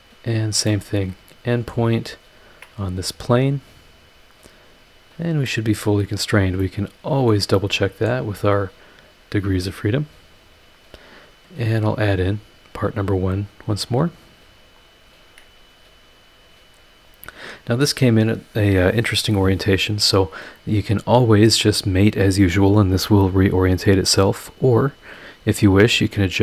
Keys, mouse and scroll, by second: 0.3 scroll down 2, 0.6-1.9 middle drag, 2.4 ctrl+click, 4.0 click, 5.1 click, 5.5-6.4 middle drag, 5.6 click, 6.6 middle click, 6.7 click, 7.5 middle click, 8.8 click, 10.3 click, 12.1 click, 13.7 click, 14.8 click, 15.2 scroll down 2, 15.5-16.1 scroll up 4, 16.2 scroll down 2, 17.0 scroll up 2, 17.7 click, 18.2 scroll down 2.